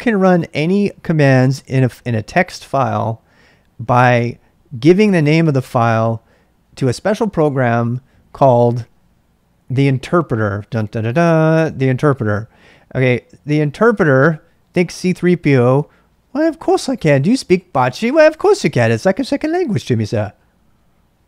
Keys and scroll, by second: 0.0-0.8 typing.